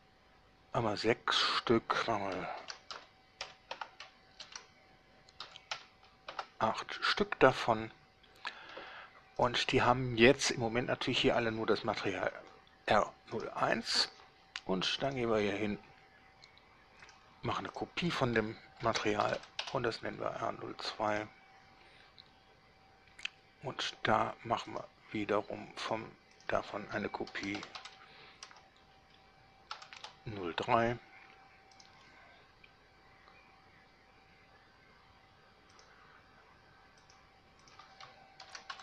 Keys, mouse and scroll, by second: 0.9 middle click, 0.9 scroll down 1, 2.7 d, 3.1 x, 3.6 4, 3.9 Return, 4.7 d, 5.6 x, 5.9 4, 6.5 Return, 7.7-9.1 middle drag, 9.7 right click, 13.6 right click, 15.3 click, 17.3 drag, 17.9 click, 19.0 shift+r, 19.4 shift+0, 19.6 2, 19.8 Return, 21.3 right click, 24.9 drag, 26.0 drag, 26.6 click, 27.5 shift+r, 27.7 0, 27.9 2, 28.7 BackSpace, 29.9 3, 30.1 Return, 31.9 right click, 35.9 drag, 37.1-37.5 drag, 37.8 click, 38.6 shift+r.